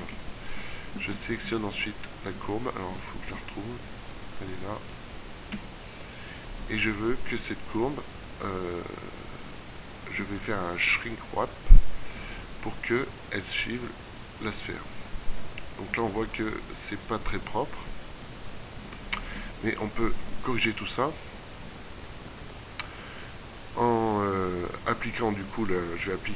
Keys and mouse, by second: 1.1 z, 1.5 z, 2.7 middle click, 3.3 middle click, 3.6 middle click, 4.2 middle click, 5.4 KP_1, 6.9 middle click, 15.4 middle click, 16.6-18.3 middle drag, 24.1-26.2 middle drag.